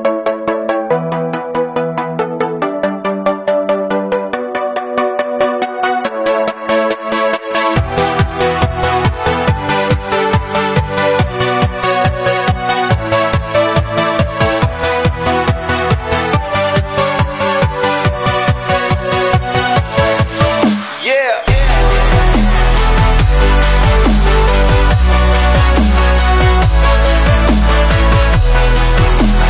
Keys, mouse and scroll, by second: 1.0-1.9 scroll up 5, 1.3 middle click, 1.9-2.8 middle drag, 2.8 Tab, 3.1 middle click, 3.3 3, 3.5 click, 3.8 drag, 5.1-5.5 middle drag, 5.5 s, 6.9 a, 7.0 s, 8.6 click, 9.2 scroll up 1, 9.4 middle click, 9.8 Tab, 10.1 ctrl+a, 10.8-11.5 right drag, 11.5 Tab, 12.8 click, 13.2 i, 15.8 scroll up 1, 15.8-16.4 middle drag, 16.4 e, 17.6 Tab, 17.9 click, 18.0 scroll up 1, 18.2 middle drag, 18.3 scroll down 3, 18.5 scroll up 1, 18.7 click, 19.0 click, 20.1-21.2 scroll down 6, 20.5 middle click, 21.2 drag, 22.0 click, 22.7 click, 23.0 scroll up 5, 23.4-24.5 shift+middle drag, 24.5 shift+d, 26.5 drag, 27.7 shift+d, 28.1-29.4 drag.